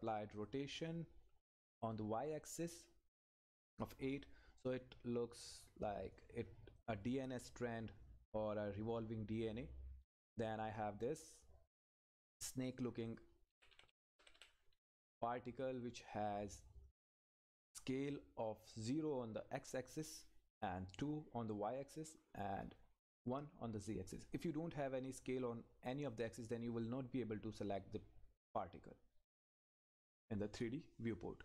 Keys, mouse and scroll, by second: 5.0 scroll up 1, 5.5 click, 6.4-6.8 scroll up 1, 6.8 click, 13.5 Up, 16.1-23.2 drag, 30.1-31.4 drag.